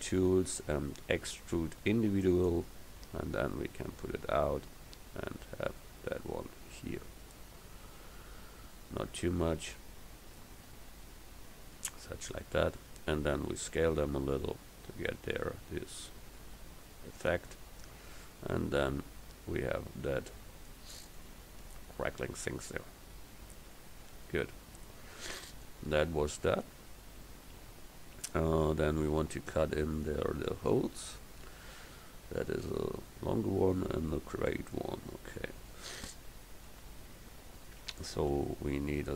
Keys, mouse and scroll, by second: 2.3 click, 13.6 s, 18.0 Tab, 32.7-34.6 middle drag, 36.8 KP_1, 38.3 a.